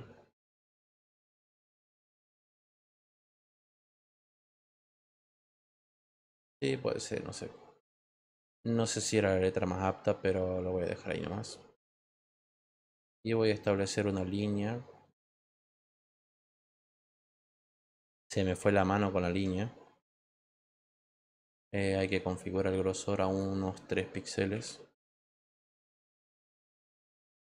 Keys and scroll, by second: 20.1 ctrl+z, 24.5 3.